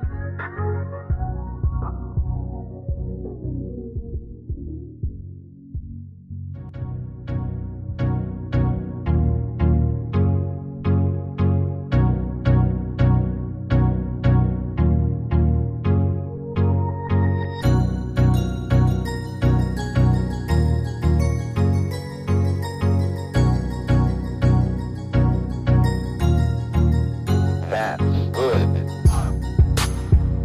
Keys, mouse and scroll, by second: 0.0 Escape, 8.7 Escape, 18.5 shift+click, 20.5 shift+click.